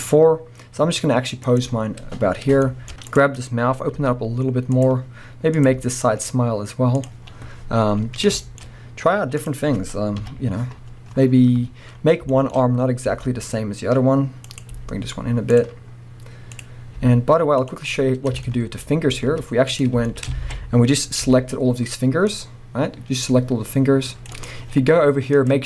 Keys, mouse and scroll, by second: 1.7-2.6 scroll down 2, 2.6 shift+middle click, 2.9-4.0 scroll up 4, 3.1 click, 4.0 g, 5.5 click, 6.0 g, 7.3-8.1 scroll down 1, 8.4-9.4 shift+middle drag, 8.6-9.4 scroll up 1, 9.4 click, 10.2 KP_1, 11.8-12.3 scroll up 1, 12.3-14.6 shift+middle drag, 12.5-13.1 shift+scroll up 1, 13.1 r, 14.6 click, 14.7 g, 15.6 click, 16.5 click, 17.0 g, 17.9-18.4 scroll down 2, 18.4-24.4 shift+middle drag, 18.8-19.1 scroll up 1, 19.1 z, 20.4 alt+a, 21.2 c, 24.4 right click, 25.4-25.6 drag.